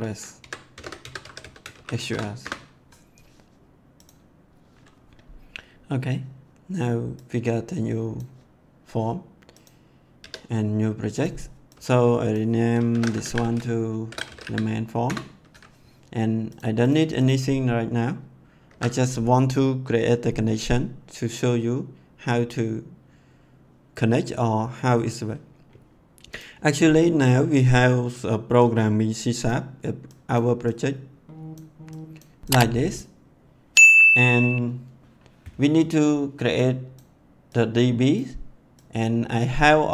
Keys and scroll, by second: 0.0-2.5 typing, 10.2 F2, 12.6-14.9 typing, 15.1 Return, 18.6 ctrl+s.